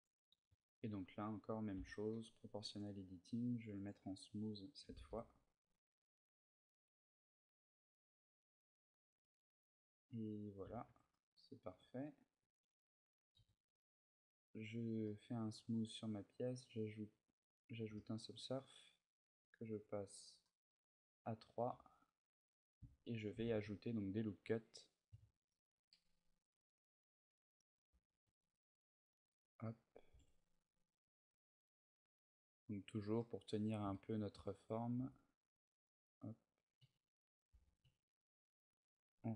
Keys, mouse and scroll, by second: 2.5 click, 10.2 click, 10.4 a, 10.7 Tab, 10.9 middle click, 11.5 z, 11.7-12.5 scroll down 1, 12.8 scroll down 7, 13.1 t, 14.2 click, 14.8 middle click, 17.7 shift+middle click, 18.3 scroll up 1, 19.5 click, 19.5 scroll up 3, 19.8 click, 20.2 middle click, 21.5 Tab, 22.0 scroll up 1, 27.8 ctrl+r, 29.1 click, 29.7 g, 32.5 click, 32.9 middle click, 33.7 shift+middle click, 34.1-34.6 scroll down 4, 34.6 g, 35.0 click, 35.9 right click, 36.5 a, 37.4 ctrl+z, 37.8 ctrl+z, 38.5 a.